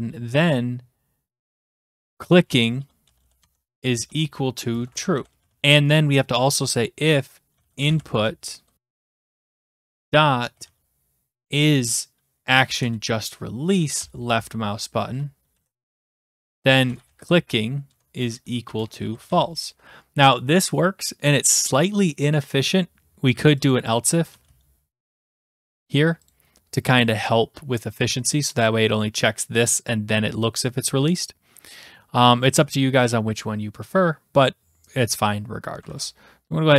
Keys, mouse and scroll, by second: 1.6-11.1 typing, 12.5 Down, 12.8 Return, 14.0 Return, 15.5 Right, 16.0-19.8 typing, 16.1 Return, 17.9 Tab, 23.7-24.8 drag, 24.1-25.0 typing, 26.3-27.4 drag, 35.8 ctrl+s.